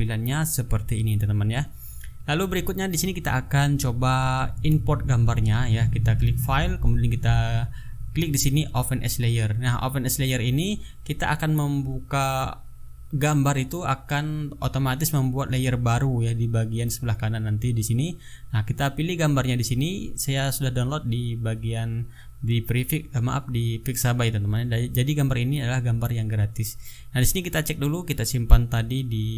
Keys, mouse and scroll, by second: 6.5 click, 17.7 click, 27.9 click, 28.8 click.